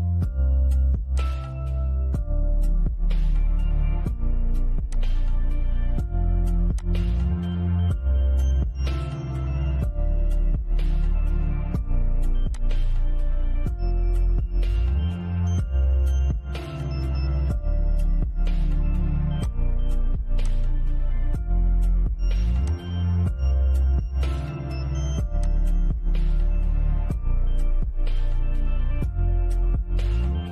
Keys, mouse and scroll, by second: 1.4-1.8 scroll up 1, 4.1 click, 11.8 click, 18.6 click, 21.9 click, 22.7-23.1 scroll down 1, 24.6 click, 30.3 click.